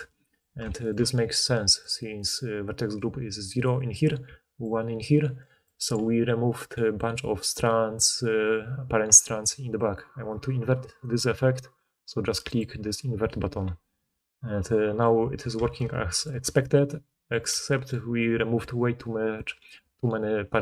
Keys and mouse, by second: 2.5-11.1 typing, 2.9-10.2 drag, 12.5-15.7 right drag, 15.7-17.8 middle drag, 17.4 d, 17.8 d, 18.5 d, 19.3 d.